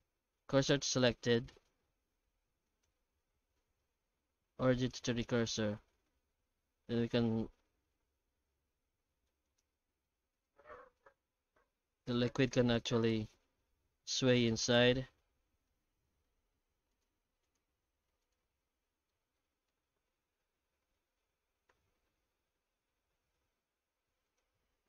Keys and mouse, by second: 2.7 right click, 3.3 w, 5.6 r, 9.7 z, 11.0 shift+middle click, 11.3 alt+shift+z, 12.5 r, 14.7-15.7 middle drag, 16.9-18.9 drag, 19.1-19.7 alt+middle drag, 21.7 r.